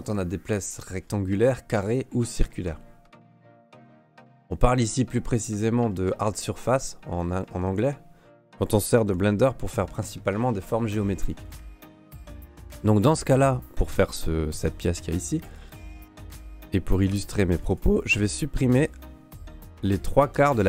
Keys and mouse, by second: 0.9 shift+middle click, 1.3 middle click, 2.5 shift+middle click, 3.1 alt+middle click, 4.4 alt+middle click, 5.2 alt+middle click, 5.8 alt+middle click, 6.6 shift+middle click, 7.4 shift+middle click, 9.1 g, 12.2 ctrl+Tab, 13.2 ", 15.6-16.6 drag, 17.1 Delete, 18.9 click, 20.3 Delete.